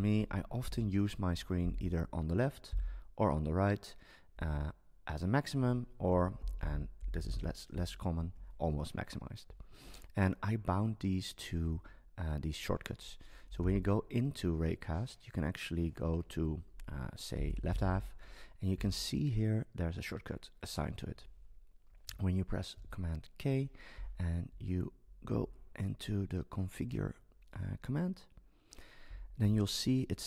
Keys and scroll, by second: 1.6 alt+Right, 2.8 alt+Left, 6.1 super+space, 7.0 BackSpace, 13.6 super+space, 22.7 super+k.